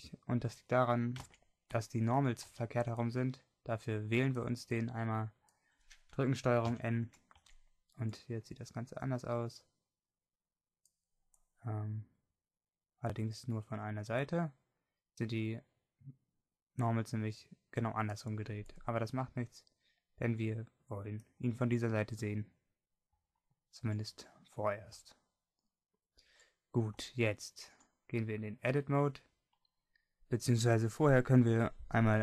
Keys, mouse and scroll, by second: 1.4 Tab, 2.3 a, 2.6 a, 6.8 ctrl+n, 7.6 Tab, 11.2-13.4 middle drag, 13.7 middle click, 16.4-19.0 middle drag, 21.6-23.4 middle drag, 24.7-31.9 middle drag.